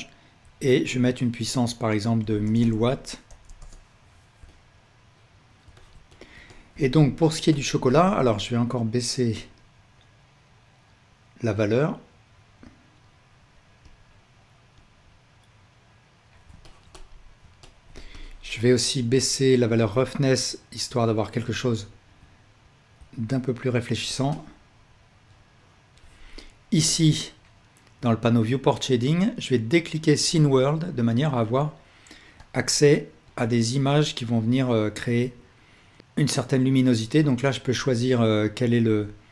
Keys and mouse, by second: 0.5-6.6 drag, 2.6 KP_0, 6.9-8.7 ctrl+alt+drag, 13.1 click, 13.9 click, 16.7-17.5 ctrl+alt+drag.